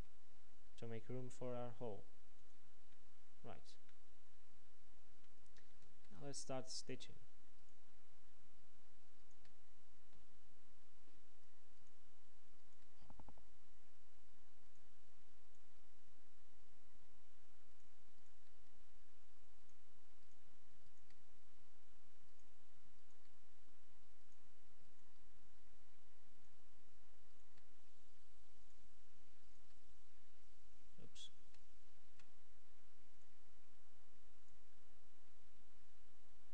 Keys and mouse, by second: 0.1 x, 6.0 ctrl+Tab, 7.7-11.3 drag, 10.2 f, 11.9-14.4 drag, 13.6 f, 14.8-20.4 drag, 17.8 f, 18.7 f, 21.3 f, 23.6 f, 25.8 f, 27.7 f, 30.0 f, 31.4 ctrl+z, 32.1 ctrl+z, 35.2 f.